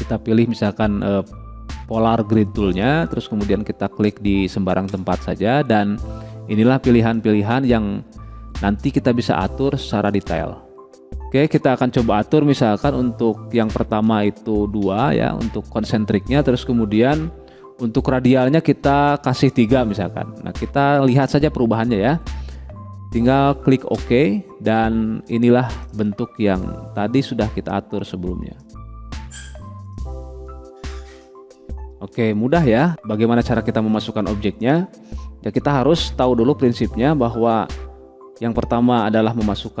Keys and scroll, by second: 15.3 2, 20.2 3.